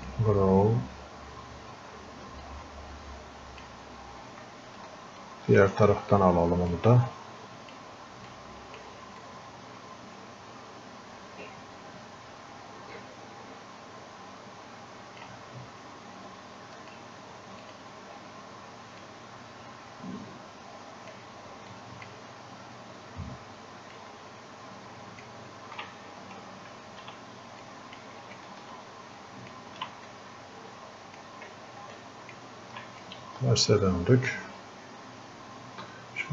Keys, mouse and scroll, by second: 2.5-5.3 drag, 5.6 ctrl+shift+click, 7.1-8.3 drag, 8.7 alt+click, 9.6-12.9 drag, 21.7 click, 22.4 scroll up 1, 23.9-26.8 alt+shift+drag, 26.8 ctrl+z, 27.7 click, 28.4-30.1 ctrl+shift+drag, 30.1-32.0 drag, 32.3 ctrl+shift+click, 33.3-36.3 drag.